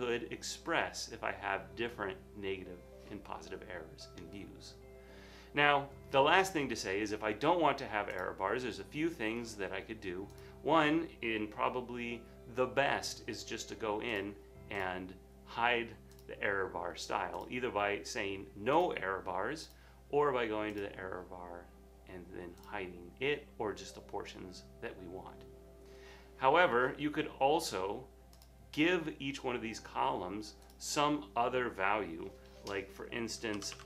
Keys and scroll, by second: 33.4-33.8 typing.